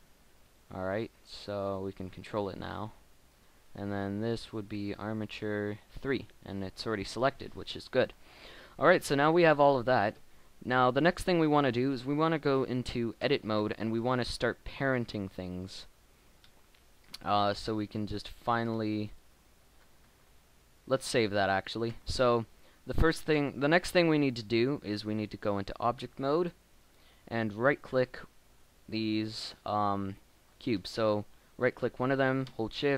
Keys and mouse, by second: 1.0 g, 2.0 middle click, 3.2-4.4 right drag, 6.2-8.8 middle drag, 12.1-14.9 middle drag, 14.1 Tab, 17.8 KP_1, 21.3 Tab, 21.3 Tab, 21.8 Tab.